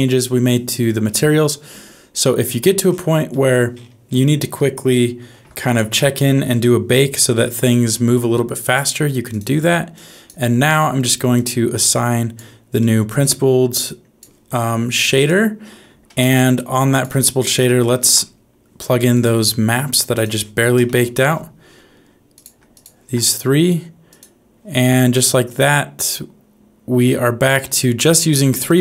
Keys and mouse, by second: 3.3 middle click, 5.3 shift+a, 9.9 click, 11.3-12.3 drag, 12.7 middle click, 13.9 click, 17.9 ctrl+shift+t, 28.6 click.